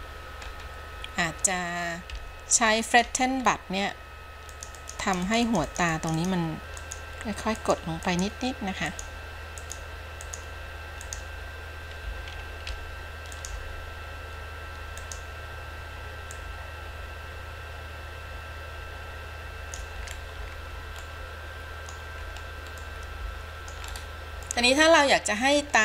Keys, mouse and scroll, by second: 0.7-1.1 scroll up 2, 2.2 f, 3.1 f, 3.6-4.0 scroll up 2, 4.7 click, 5.0 click, 5.3 click, 5.7 click, 5.9 click, 6.2 click, 6.4 click, 6.6 ctrl+z, 7.0 click, 7.8 click, 8.3 click, 9.2 click, 9.8 click, 10.5 click, 11.2 click, 12.9 f, 16.5-20.0 drag, 20.3-20.8 scroll down 5, 21.2-22.2 middle drag, 22.4-23.0 scroll down 3, 23.0 middle click, 24.1-24.4 scroll up 3, 24.7-25.8 middle drag.